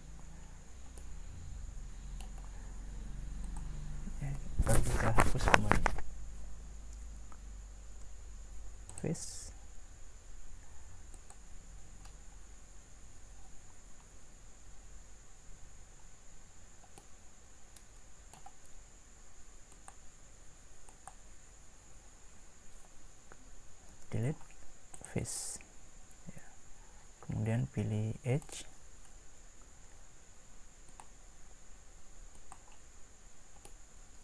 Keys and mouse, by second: 1.0-3.4 middle drag, 3.4-7.9 drag, 7.9 Delete, 13.4 middle click, 14.4-17.8 middle drag, 23.9 Delete, 25.1 Delete, 33.8-34.2 middle drag.